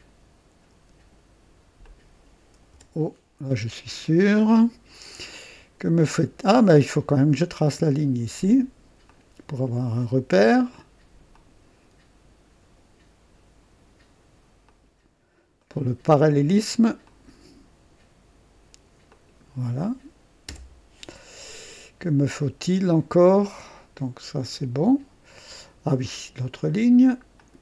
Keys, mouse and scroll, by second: 1.8 click, 2.7 o, 3.6-4.0 scroll up 1, 4.0 right click, 9.0 click, 11.3 click, 14.6 click, 15.6 right click, 17.0 click, 19.0 click, 20.4 p, 23.4-25.8 drag, 27.3 click.